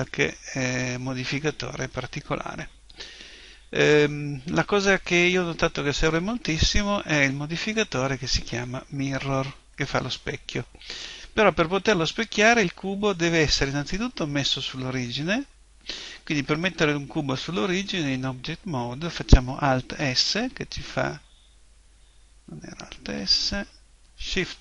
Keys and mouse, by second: 20.0 alt+s, 23.1 Escape, 24.2 shift+s.